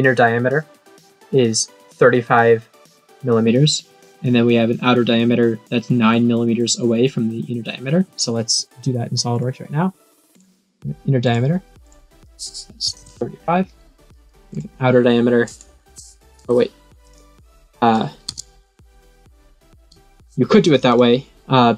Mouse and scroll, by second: 9.3 click, 10.3 click, 11.2 click, 11.8 click, 14.4 click, 15.4 click, 17.0 click, 20.8 click.